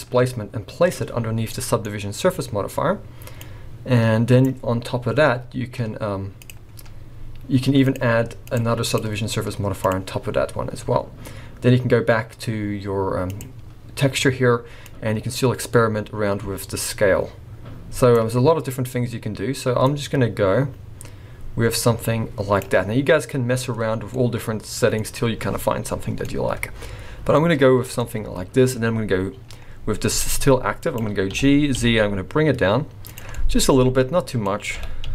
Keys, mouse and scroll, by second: 1.5 middle click, 1.9-2.6 scroll up 4, 3.4 click, 6.4 click, 7.9 click, 8.5 click, 8.9 click, 13.3 click, 14.8 click, 19.9 click, 23.9-24.2 scroll down 6, 24.2 middle click, 26.2 middle click, 28.0 middle click, 28.7 scroll up 2, 29.5 scroll down 4, 30.3 g, 31.3 g, 33.3 middle click, 34.7 g.